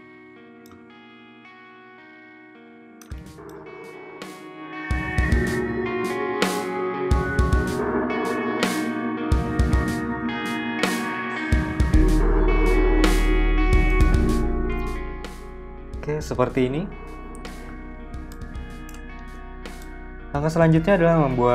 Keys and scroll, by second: 2.3 v.